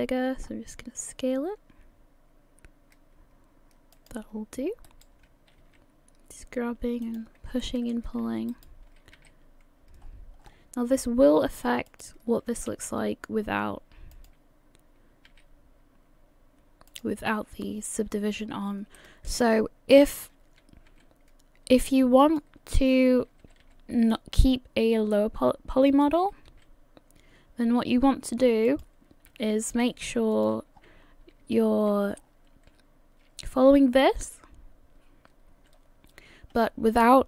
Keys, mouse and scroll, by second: 5.6 right click, 6.7 g, 7.6 shift+middle click, 8.5 alt+right click, 9.2 s, 12.5 g, 15.3 s, 18.5 scroll up 1, 19.0 shift+middle click, 20.0 alt+right click, 20.9 s, 23.5 g, 26.6 s, 29.5 g, 30.8-31.3 scroll down 4, 32.2 scroll down 3, 32.2 a, 32.3 a.